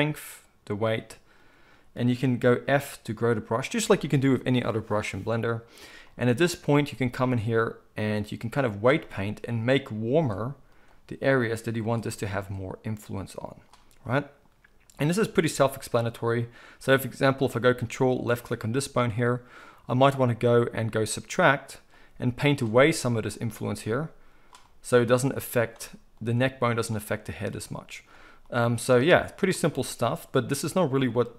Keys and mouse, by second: 2.6 f, 3.6-7.2 middle drag, 7.2-15.3 drag, 15.3-18.2 ctrl+middle drag, 18.2 ctrl+click, 18.3-20.1 ctrl+middle drag, 20.1-31.3 drag.